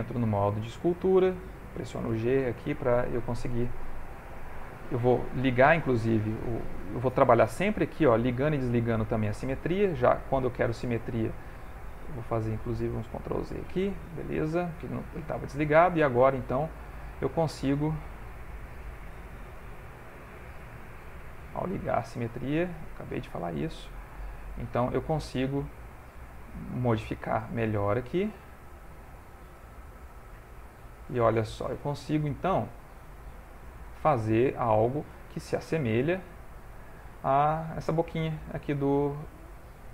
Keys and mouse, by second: 2.1 g, 2.6 click, 3.5 f, 6.5 click, 10.9 click, 12.0 ctrl+z, 12.2 ctrl+z, 12.7 ctrl+z, 14.2 ctrl+Tab, 15.9 click, 18.0 click, 18.7 click, 19.4 ctrl+z, 20.4 ctrl+z, 21.8 click, 23.4 click, 24.6 click, 25.1 click, 25.5 click, 26.1 click, 26.6 click, 27.9 f, 28.9 click, 30.2 f, 30.5 click, 33.4 click, 35.4 ctrl+middle click, 36.2 shift+middle click, 37.7 ctrl+middle click, 38.7 ctrl+middle click, 39.4 shift+middle click.